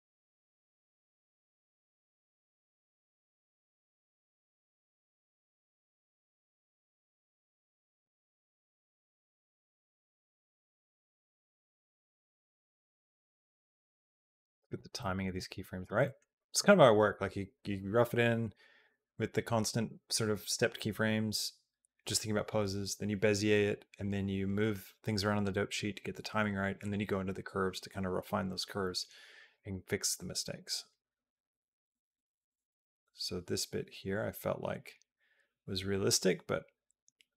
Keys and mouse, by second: 1.4 click, 2.0-4.6 drag, 5.3 click, 6.4 click, 6.9 click, 10.1 middle click, 11.3-13.4 drag, 14.8 middle click, 15.8 middle click, 16.1 click, 29.4-37.3 drag.